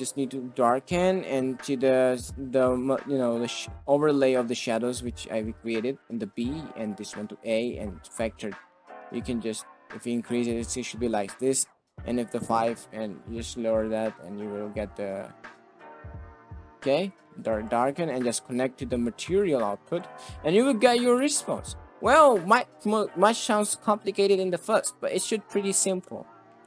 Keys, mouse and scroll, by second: 9.0-18.1 drag, 18.1 middle click, 20.5 middle drag, 21.2 ctrl+space, 22.1 KP_0, 25.8 ctrl+space.